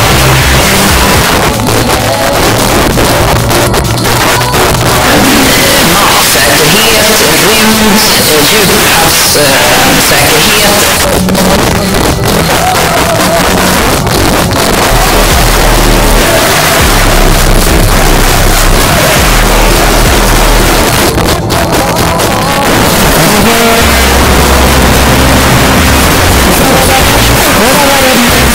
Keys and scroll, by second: 1.2 Page_Down, 10.8 Page_Down, 20.9 Page_Down.